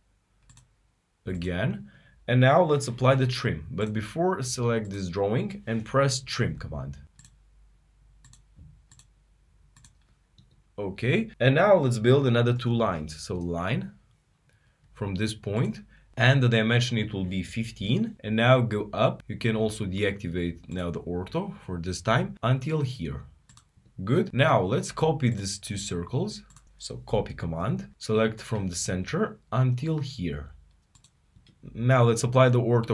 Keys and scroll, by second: 8.8 typing, 12.3-13.0 typing, 15.8-16.8 typing.